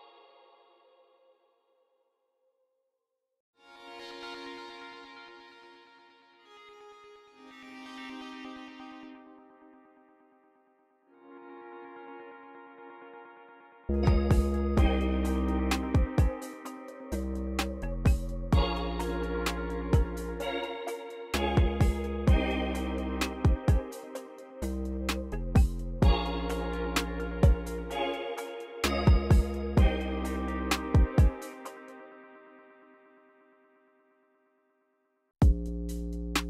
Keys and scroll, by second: 1.5-4.1 typing, 11.1 v, 12.9 x, 13.7 s, 15.3 x, 17.0 x, 21.7 x, 29.1 x, 31.4 space, 31.9 c, 32.4 c, 34.7 super+r, 35.0 u, 35.3 space.